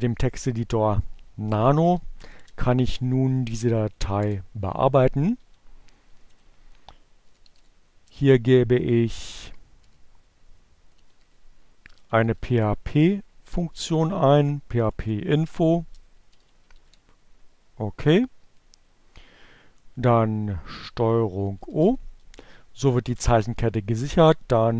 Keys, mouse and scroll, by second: 0.4-1.5 typing, 2.7 p, 3.2 Return, 5.8-7.0 typing, 8.3 p, 10.4-13.9 typing, 16.1 shift+<, 21.0 ctrl+o, 21.9 Return, 23.8 ctrl+x.